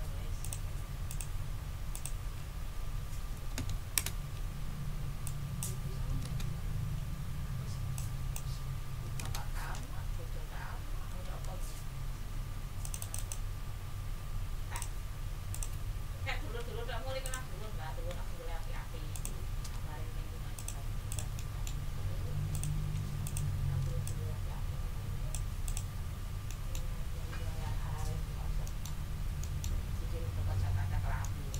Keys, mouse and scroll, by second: 0.4 click, 1.1 click, 1.9 click, 3.3 1, 3.5 0, 3.9 Return, 5.2 click, 6.1 6, 6.3 Return, 7.9 click, 9.0 4, 9.2 Return, 11.1 d, 12.8 click, 14.7 click, 15.5 click, 16.3 ctrl+z, 17.2 ctrl+click, 18.1 d, 19.1 shift+middle click, 20.5 click, 21.1 click, 21.8-22.1 ctrl+scroll up 2, 22.5 ctrl+click, 23.2 shift+click, 24.0-25.5 ctrl+shift+drag, 25.6 ctrl+click, 26.0 ctrl+scroll down 2, 26.4 ctrl+click, 26.6 ctrl+middle click, 26.9 ctrl+scroll down 2, 28.6 ctrl+middle click, 29.0 ctrl+scroll down 2, 29.4 ctrl+middle click, 30.3-30.9 ctrl+scroll up 4, 31.2 ctrl+click.